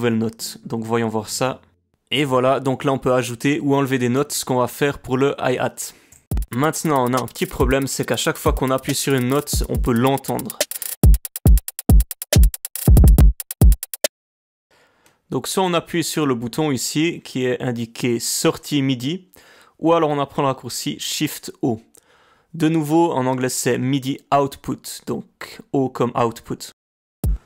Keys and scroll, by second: 6.2 space, 14.1 space, 27.2 space.